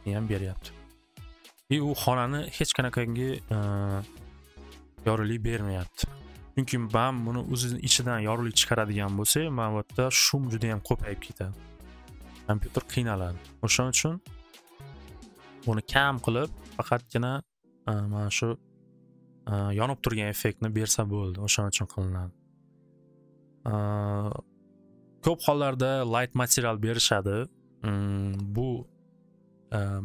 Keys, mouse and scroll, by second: 14.3 middle click, 15.3 click, 17.6 click, 18.0 click.